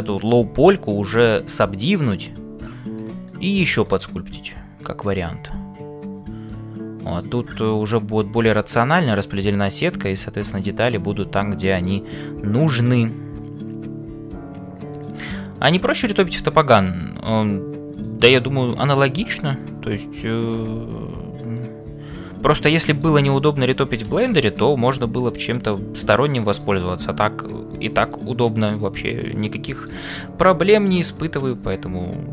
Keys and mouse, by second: 3.2 shift+middle click, 3.8-7.6 middle drag, 17.1 click, 18.0 click, 20.0 middle click, 21.5 click, 22.9 middle click, 23.2 Tab, 24.5 ctrl+s, 25.2 shift+middle click, 26.0 middle click, 28.1 click, 28.6-29.8 middle drag, 30.1-32.3 shift+middle drag.